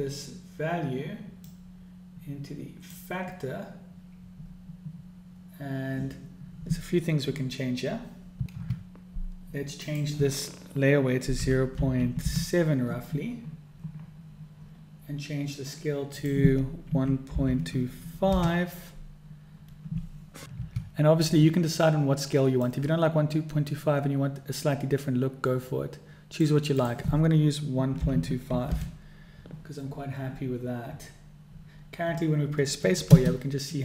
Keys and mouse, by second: 2.1-3.7 drag, 10.3-13.9 drag, 16.6-20.1 drag, 23.1-26.9 drag, 27.3-30.0 drag, 33.7 space.